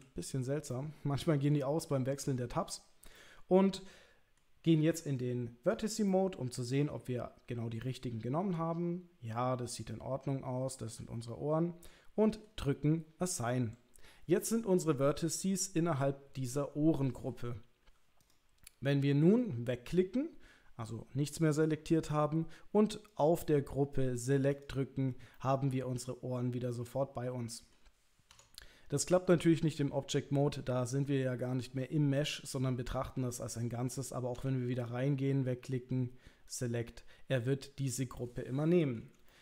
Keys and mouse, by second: 0.7 middle click, 3.2-4.4 middle drag, 5.7 click, 6.1 middle click, 7.8-12.4 middle drag, 18.2 click, 18.6 middle click, 23.1 click, 24.6 click, 25.3-27.7 middle drag, 28.3 Tab, 34.4 Tab, 36.5 click, 38.2 middle click, 39.3 shift+middle click.